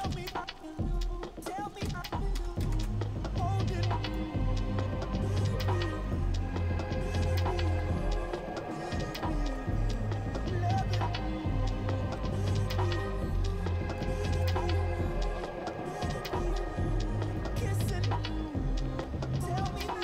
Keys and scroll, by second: 0.0-0.5 typing, 1.9 super+Tab, 2.4 super+Tab.